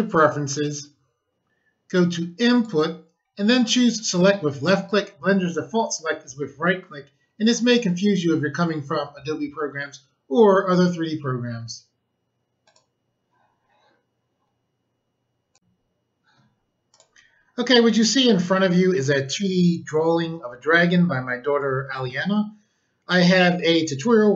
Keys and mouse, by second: 2.5 click, 12.6 click, 15.4 click, 16.5 click, 16.8 click.